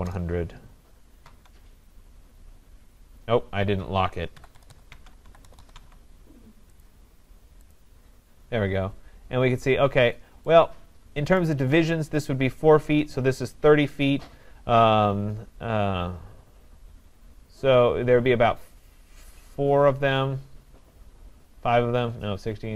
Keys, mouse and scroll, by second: 0.0-0.5 typing, 1.3 Tab, 4.1-6.1 typing, 4.9 Tab, 11.8 right click, 11.8 scroll down 3.